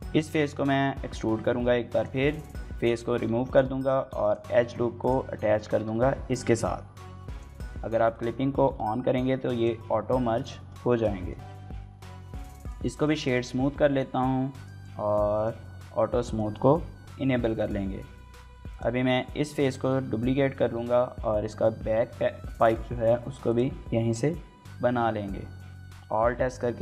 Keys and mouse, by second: 1.7 click, 2.2 x, 2.9 2, 3.3 alt+click, 4.0 alt+click, 5.3 middle click, 5.5 g, 5.7 x, 6.4 y, 7.1 click, 7.9 click, 8.3 g, 8.5 y, 9.4 click, 10.1 shift+middle click, 10.3 middle click, 10.5 Tab, 11.0 shift+middle click, 11.2 middle click, 12.1 right click, 12.8 shift+middle click, 13.0 middle click, 14.4 drag, 15.1 click, 16.0 shift+middle click, 16.2 middle click, 16.5 Tab, 17.1 shift+middle click, 17.3 middle click, 18.2 z, 19.3 3, 20.0 click, 20.6 KP_1, 22.3 shift+d, 22.5 z, 23.3 click, 25.0-26.2 drag, 25.7 e, 26.2 l, 26.5 alt+s.